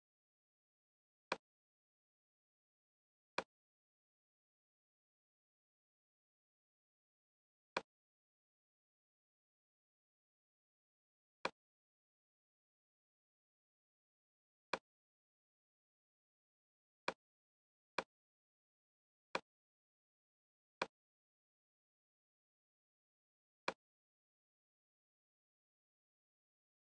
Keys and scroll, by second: 25.4 Left, 26.0 Down.